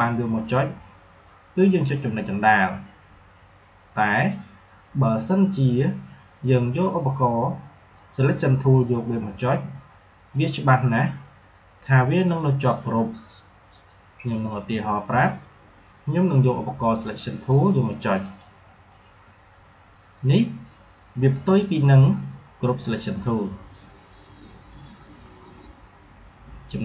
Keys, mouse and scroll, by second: 16.9 click.